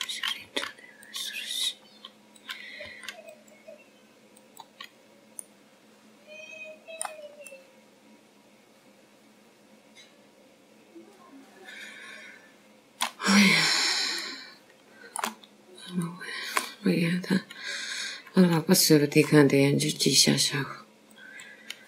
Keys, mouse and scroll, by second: 2.8 r, 3.4 g, 4.6-4.9 scroll down 2, 5.3 click, 5.7 g, 7.3 click, 8.3 middle click, 10.4 middle click, 16.2-16.9 scroll down 3, 16.9 scroll down 2, 17.1 shift+middle click, 18.3-18.6 scroll down 3, 18.9 shift+middle click.